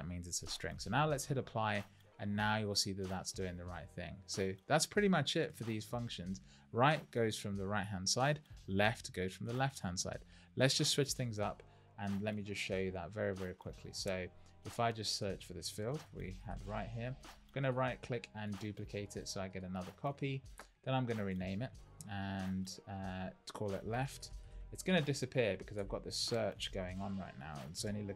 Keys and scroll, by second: 23.9 shift+l, 27.7 Return.